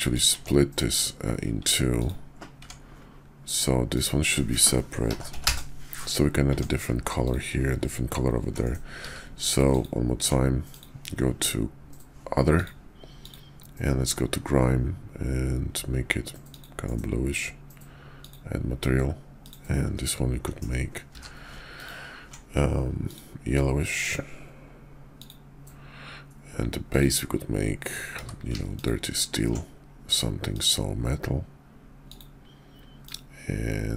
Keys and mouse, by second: 0.3 Tab, 1.5 Tab, 2.0 click, 2.5 Tab, 5.0 ctrl+l, 5.3 p, 6.4 Tab, 7.1 click, 9.0 q, 21.0 q, 28.1 q.